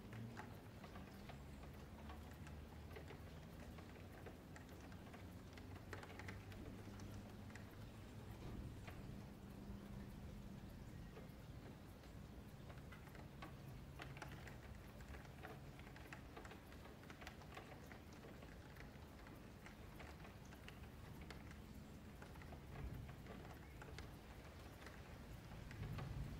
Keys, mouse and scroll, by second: 0.0 middle click, 0.7 ctrl+z, 2.0 click, 4.2 scroll down 4, 4.5 middle click, 4.7 F3, 4.9 middle click, 5.6 Tab, 5.7 scroll down 1, 5.9 a, 6.0 a, 6.2-6.5 scroll up 4, 6.5 click, 8.2 ., 9.4 ,, 10.7 click, 12.8 click, 16.8-17.1 middle drag, 17.1 a, 17.3 a, 17.5-19.0 middle drag, 19.0 scroll down 3, 19.3-19.9 middle drag, 19.9-20.6 scroll up 4, 20.6 click, 20.9 shift+middle drag, 21.1 Tab, 21.7 F2, 22.4 F3, 22.9 1, 23.1 click, 23.7-24.4 scroll down 2, 24.4 F3, 24.8 Tab, 26.2-26.3 drag.